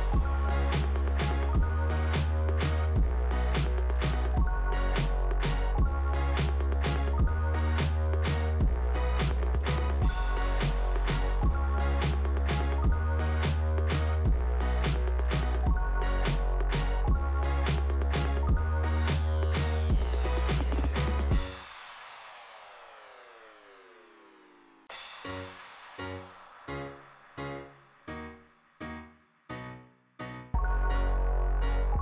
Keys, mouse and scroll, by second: 1.4 click, 5.3-7.3 scroll down 2, 7.4 scroll down 1, 8.3 scroll up 2, 8.4 scroll down 2, 8.5 scroll up 2, 8.6 scroll down 2, 11.5 click, 17.7 click, 17.9 click, 18.7 scroll down 1, 19.8 scroll down 1, 20.1 click, 25.5 click, 26.6 click, 27.8 click, 30.3 click, 30.5 click, 30.6 double click.